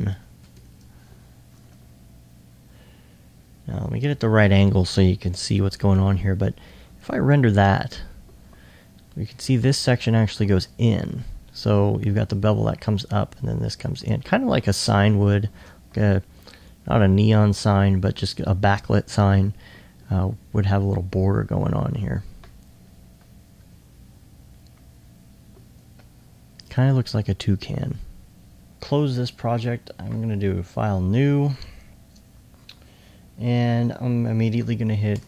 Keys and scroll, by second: 23.2 2.